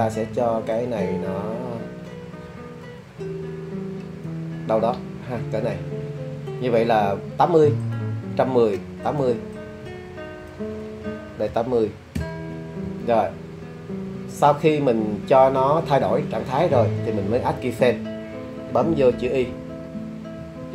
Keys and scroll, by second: 11.5 0, 12.2 Return, 20.4 i.